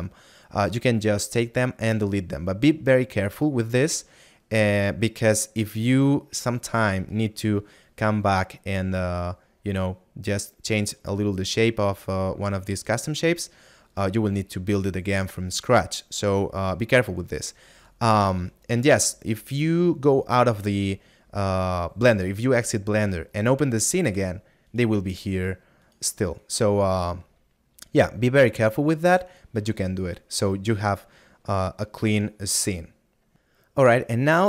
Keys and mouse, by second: 25.0 right click, 27.8 middle click.